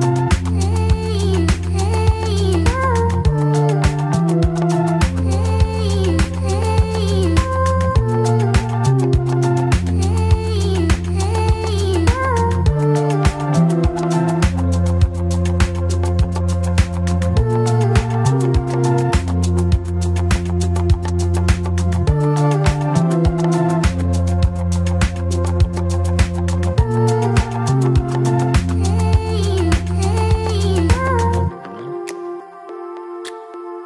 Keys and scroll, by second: 0.3 2, 1.3 2, 1.9 ctrl+r, 2.1 ctrl+c, 2.7 1, 3.5 ctrl+shift+e, 4.6 2, 10.9 1, 11.9 ctrl+shift+e, 12.5 ctrl+shift+e, 14.7 2, 15.1 ctrl+r, 15.2 ctrl+c, 15.8 1, 16.6 ctrl+shift+e, 17.5 1, 18.0 alt+c, 24.7 1, 29.3 F4, 31.4 2, 31.7 F4.